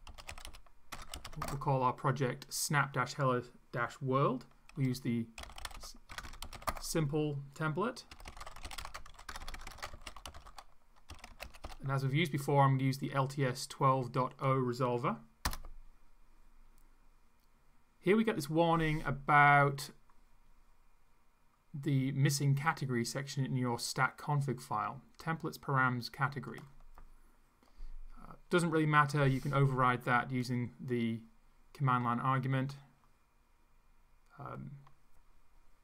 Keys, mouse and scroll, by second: 0.0-1.8 typing, 4.8-12.1 typing, 15.4 Return, 26.5 click, 30.4-32.2 drag.